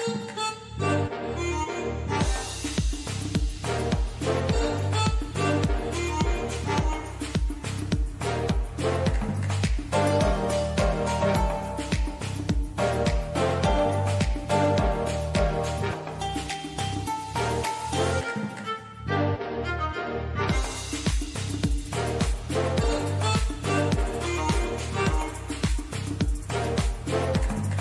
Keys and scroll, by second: 5.4 t, 20.9 super+d, 27.7 super+d.